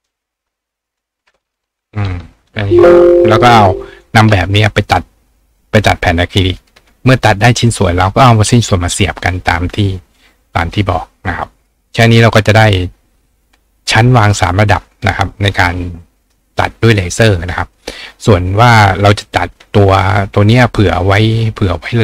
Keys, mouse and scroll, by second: 0.9 click, 3.3 click, 11.6 click, 12.0 right click, 13.7 click, 21.1 click.